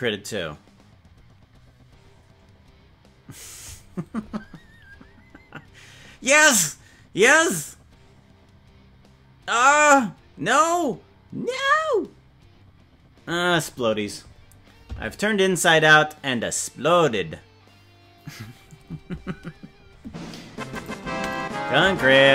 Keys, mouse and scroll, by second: 20.7 click, 21.1 space, 21.9 space.